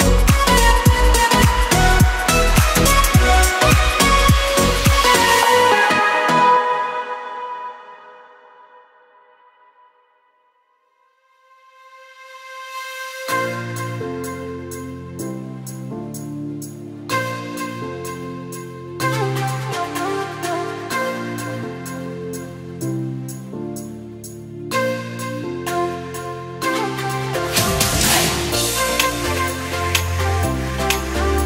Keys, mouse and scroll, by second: 0.0 click, 1.5 click, 1.9-2.6 scroll down 5, 2.6 Tab, 3.6 click, 4.7 e, 7.1 click, 7.9 ctrl+b, 10.0 Tab, 10.6 right click, 11.9 shift+a, 16.6 click, 18.3 KP_7, 19.2 click, 23.2 click, 23.9 click, 24.8 click, 25.4 click, 25.8 KP_0, 25.9 KP_0, 27.4 shift+d, 31.2 shift+s.